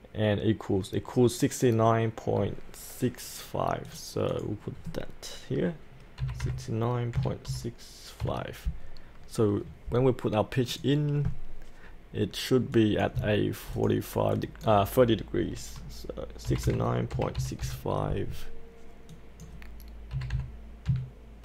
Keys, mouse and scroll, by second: 6.2-8.2 typing, 10.7-15.5 drag, 16.5 KP_6, 17.1 KP_3, 17.4 KP_6, 17.6 KP_5, 19.1 click, 20.1 KP_6, 20.9 KP_Decimal.